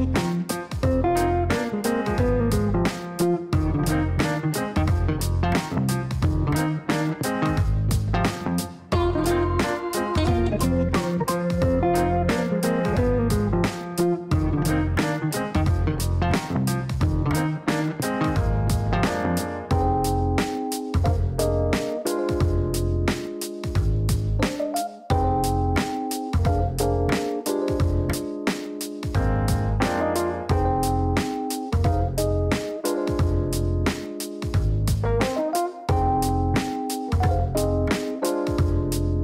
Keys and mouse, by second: 4.6 click, 5.7 space, 9.1 click, 10.2 click, 11.7 click, 12.7 click, 14.1 click, 15.8 click, 17.5 click, 18.4 click, 18.9 right click, 19.7 click, 20.3 ctrl+click, 21.5 click, 23.6 click, 24.2 ctrl+click, 25.4 click, 26.2 click, 27.4 click, 27.9 click, 29.2 click, 29.7 click, 30.2 right click, 31.3 click, 32.7 click, 33.9 click, 34.4 click, 35.6 click, 37.2-38.1 typing.